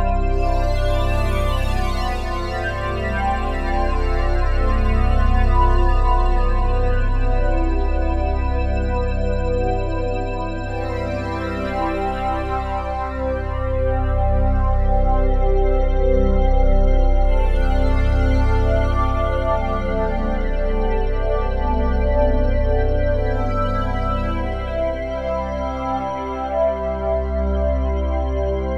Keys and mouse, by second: 1.6 shift+click, 2.3 click, 2.3 typing, 3.1-4.1 ctrl+alt+drag, 5.1 ctrl+s, 5.7-8.7 alt+drag, 10.1 click, 13.3-16.6 alt+drag, 17.3 click, 22.1 click, 22.7 click, 24.2 click, 25.8 m, 26.9 click, 28.5 click.